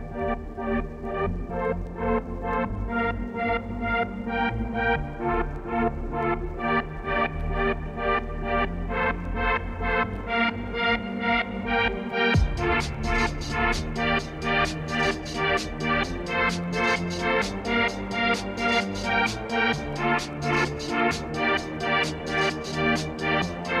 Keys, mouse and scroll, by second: 3.6 middle click, 4.2-4.9 scroll down 4, 4.9-5.4 scroll down 1, 5.6-7.8 drag, 7.8 middle click, 8.3-9.7 scroll up 3, 9.7 scroll up 1, 9.9 KP_3, 10.2 shift+middle click, 10.9 alt+d, 13.3-14.1 scroll down 2, 13.5 middle click, 14.1 click, 14.3-15.5 middle drag, 15.5-16.7 scroll up 3, 20.0 click, 20.2 middle click, 20.4 Tab, 21.0 ctrl+r, 21.6 ctrl+r, 22.4 2, 22.7-23.8 alt+drag.